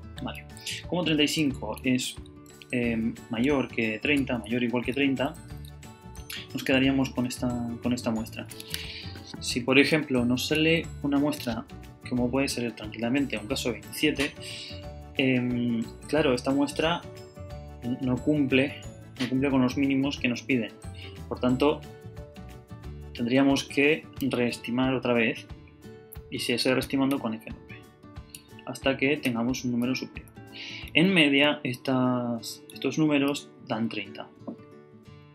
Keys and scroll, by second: 0.4 super+Left, 1.2 super+Up, 1.6 Right, 4.5 super+Right, 5.4 Down, 5.7 Right, 5.9 Down, 6.2 Left, 6.8 Down, 8.1 Up, 10.6 F9, 27.1 F9, 28.3 F9, 32.6 F9.